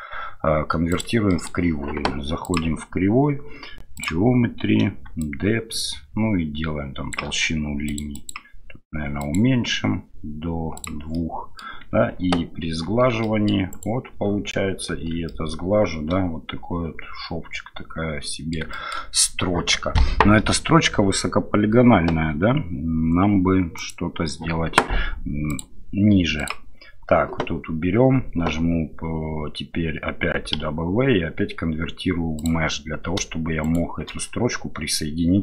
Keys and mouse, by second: 1.3 middle click, 2.4-5.0 right drag, 10.8-11.1 drag, 11.1-11.6 middle drag, 12.9 ctrl+3, 13.2 middle click, 13.7 click, 14.9 ctrl+3, 15.2-18.5 middle drag, 18.7 shift+middle drag, 23.8 right click, 25.5 right click, 26.4 right click, 33.6 shift+right click.